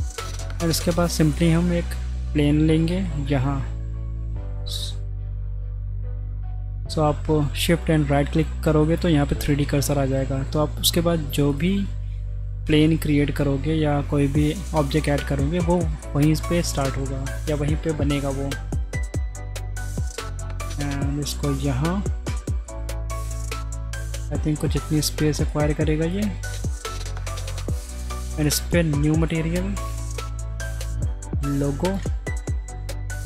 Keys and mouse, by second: 0.8 middle click, 1.3-1.7 middle drag, 6.3 click, 9.6 shift+a, 12.7 Tab, 13.0 a, 13.4 s, 15.7 shift+click, 16.4 click, 20.0 s, 22.3 Tab, 22.6-23.0 middle drag, 25.7 click, 26.8 middle click, 29.4-33.2 drag, 32.4 Left.